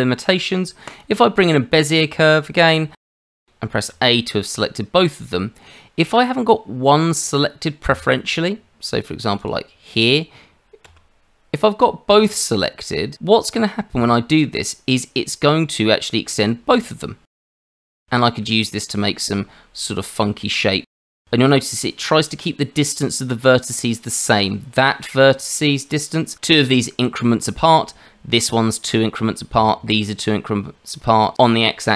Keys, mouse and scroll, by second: 1.7-2.1 scroll up 2, 2.1 Tab, 3.2 shift+middle click, 3.9 a, 9.4 click, 10.8 a, 12.6-13.0 scroll down 1, 13.1 shift+middle click, 16.5 click, 18.1 shift+middle click, 19.0 click, 20.7 shift+middle click, 21.0 scroll down 3, 21.3 shift+middle click, 26.3 click.